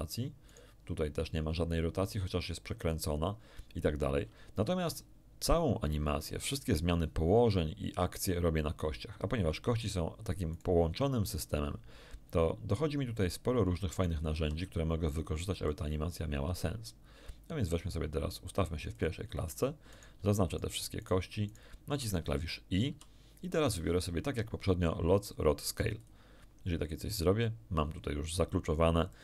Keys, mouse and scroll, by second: 0.4 right click, 4.8 right click, 10.5 right click, 11.2 r, 13.1 ctrl+click, 13.9 ctrl+right click, 14.3 ctrl+r, 15.6 ctrl+click, 17.9-19.1 drag, 19.9 shift+right click, 20.5 shift+right click, 20.9 shift+right click, 21.4 shift+right click, 22.9 i, 25.9 click, 29.1-29.2 drag.